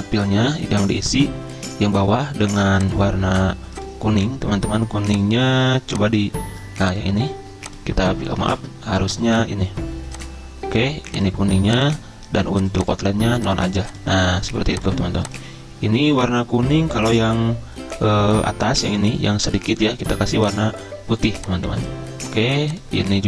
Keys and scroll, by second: 8.4 ctrl+z.